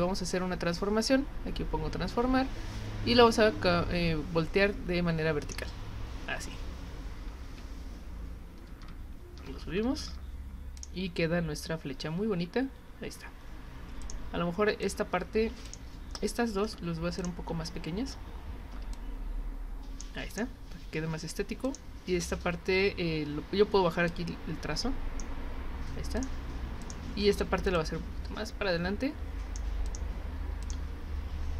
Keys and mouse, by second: 5.4 click, 10.8 click, 14.0 click, 14.8 click, 15.7 click, 17.2 click, 18.9-20.0 drag, 20.3 click, 21.7 click, 24.1-25.2 drag, 26.2 click, 26.8 click, 27.7-29.5 drag, 29.9 click, 30.6 click.